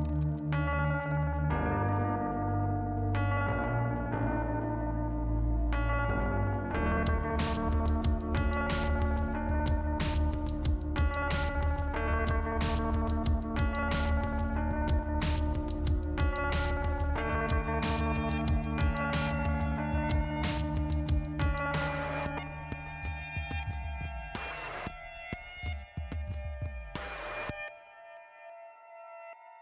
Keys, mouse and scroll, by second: 0.9 click, 1.3 click, 1.8 click, 3.8 click, 5.1 click, 6.4 click, 10.4 right click, 11.4 click, 13.2 click, 14.0 right click, 14.9 click, 20.1 click, 23.7 click, 24.4 click, 25.3 click, 25.8 click, 28.6 right click.